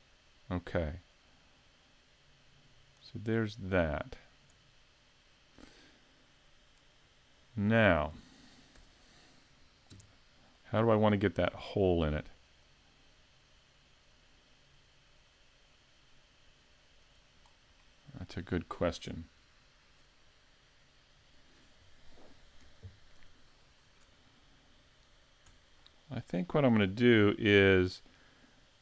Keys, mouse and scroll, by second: 1.3 click, 6.8 click, 8.1-8.8 scroll up 2, 8.8 z, 9.9 KP_5, 10.6 middle click, 12.4 click, 17.4-17.8 scroll down 1, 17.8 middle click, 25.5 Tab, 25.8 middle click, 26.8 w.